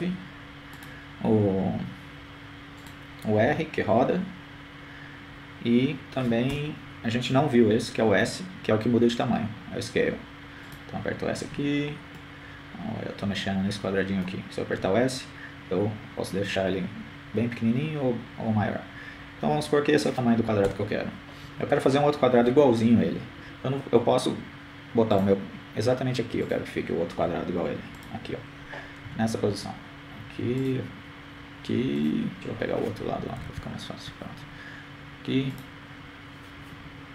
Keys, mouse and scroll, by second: 3.5 g, 7.1 right click, 7.8 r, 12.5 s, 15.8 KP_3, 16.5-18.0 middle drag, 19.2 s, 29.3-32.0 drag, 31.5 KP_7, 32.2-33.4 drag, 33.1 KP_3, 34.8-36.0 drag, 36.2-37.1 drag.